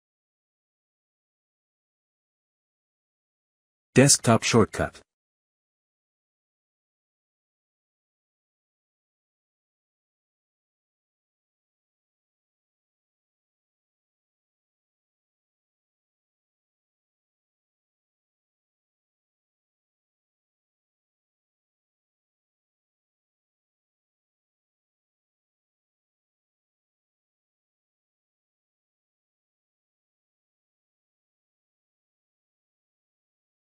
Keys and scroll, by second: 8.2-19.2 typing, 8.4 Return, 20.2 ctrl+s, 23.6 BackSpace, 26.2 *, 26.8 ctrl+s, 31.2 Return.